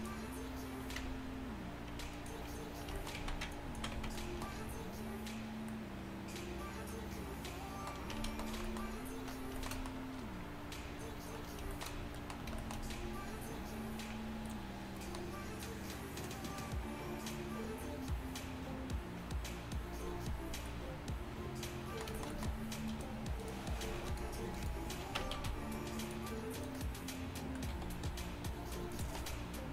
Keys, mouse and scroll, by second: 1.1 Tab, 3.2 z, 3.6 click, 4.0 z, 4.5-5.7 drag, 8.2 Tab, 8.6 a, 23.9 z, 25.2 Tab, 25.4 z, 27.8 g.